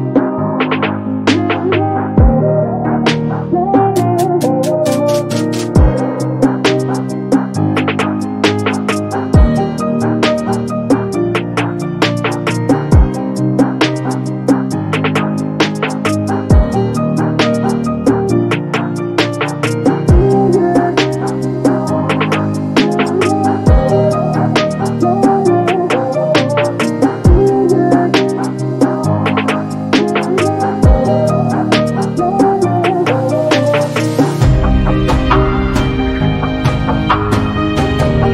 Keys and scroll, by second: 1.4 p, 2.5 0, 2.8 KP_Decimal, 3.0 5, 3.5 Return, 4.1 space, 7.6 e, 9.8 space, 12.4 b, 23.2 space, 31.9 b.